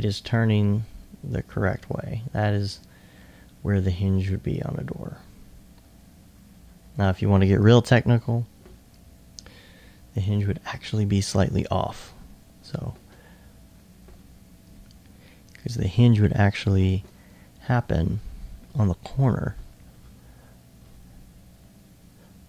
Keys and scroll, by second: 12.2 s, 14.6-15.6 typing, 16.9 super+e.